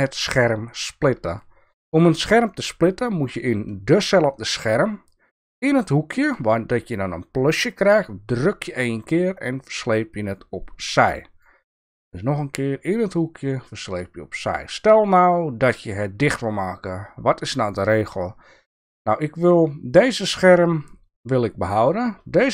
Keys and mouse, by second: 8.4-11.4 drag, 13.2-14.5 drag.